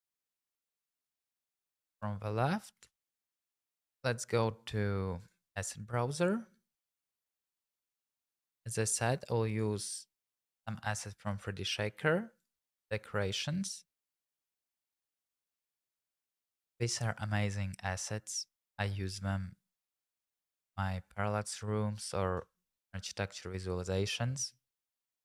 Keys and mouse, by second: 1.3 click, 1.8 Tab, 2.2 middle click, 5.2-6.4 drag, 7.4 click, 11.3-12.4 middle drag, 14.3 click, 15.1 click.